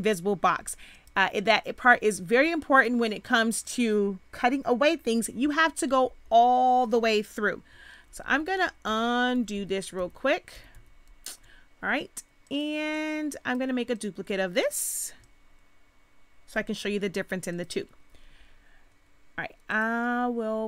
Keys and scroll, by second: 8.1 ctrl+z.